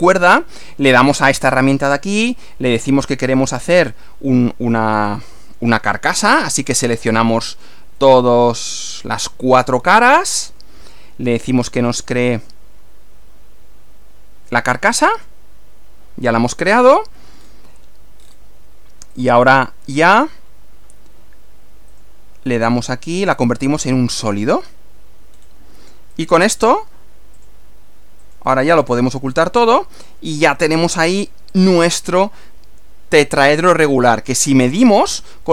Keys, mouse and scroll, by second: 1.3 click, 3.4 click, 5.1 click, 6.2 ctrl+click, 6.7 ctrl+middle click, 7.5 ctrl+click, 8.0 ctrl+middle click, 8.9 ctrl+click, 9.6-10.8 ctrl+middle drag, 15.1 click, 16.5 click, 17.4 scroll up 1, 18.2 scroll down 1, 19.2 click, 21.9 click, 22.7 click, 24.2 click, 25.3 scroll down 1, 26.1 click, 26.4 right click, 27.3 click, 28.2 click, 28.5 right click, 29.3 click, 30.3 click, 30.5 right click, 31.5 click, 32.5-34.5 middle drag, 34.7 scroll down 1, 34.7-35.1 scroll up 2, 35.1-35.4 scroll down 2.